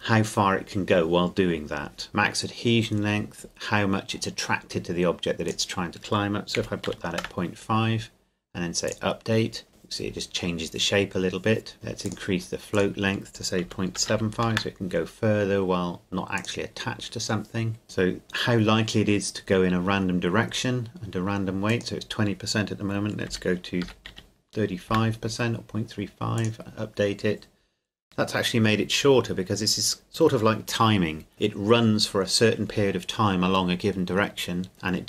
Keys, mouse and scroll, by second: 5.5 click, 6.5 KP_Decimal, 6.9 KP_5, 7.2 KP_Enter, 8.9 click, 11.7 click, 13.7 KP_Decimal, 14.0 KP_7, 14.1 KP_5, 14.5 KP_Enter, 16.4 click, 21.7 click, 23.3 KP_Decimal, 23.8 KP_3, 24.1 KP_5, 24.9 KP_Enter, 26.4 click.